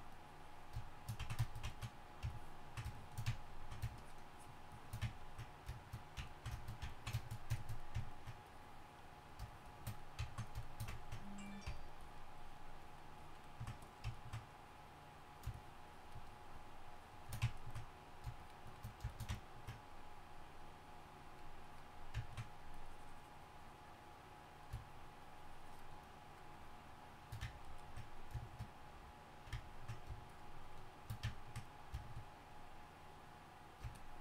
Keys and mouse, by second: 1.4-3.7 drag, 9.3-10.6 drag, 11.8-13.4 drag, 13.5 click.